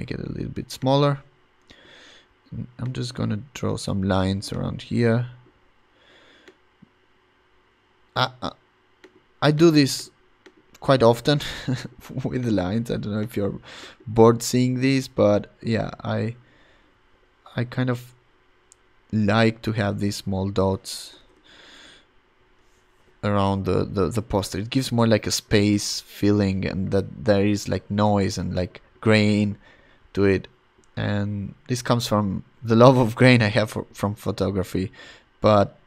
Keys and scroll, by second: 0.7 [, 21.1 ], 22.2 ].